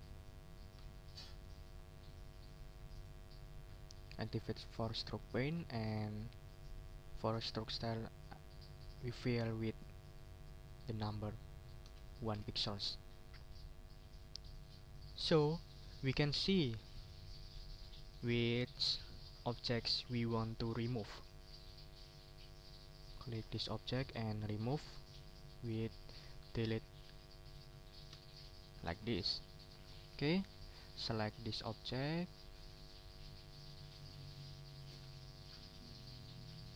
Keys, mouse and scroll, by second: 1.1 middle click, 2.9 click, 3.4 middle click, 4.3 click, 5.1 click, 5.8 click, 6.6 click, 11.8 1, 12.3 Return, 17.8 click, 21.6 click, 23.0-24.2 drag, 28.1 Delete, 29.3-29.8 scroll down 1, 29.8 ctrl+scroll up 1, 30.2 ctrl+click, 30.3-30.6 ctrl+scroll down 1, 30.6 ctrl+scroll up 2, 31.2 ctrl+click, 32.1 shift+click, 32.9 shift+click, 33.5 click, 34.6 ctrl+z, 35.4-36.4 ctrl+drag.